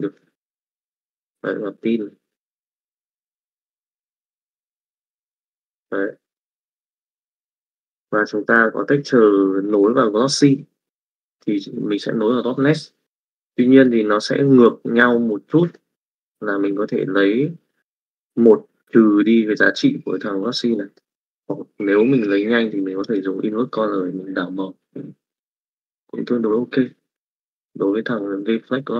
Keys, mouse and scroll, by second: 2.3 middle click, 4.0 middle click, 5.1-7.4 drag, 7.7 middle click, 10.1 middle click, 13.7 middle click, 15.7 middle click, 16.8 middle click, 21.1 middle click, 22.1 click.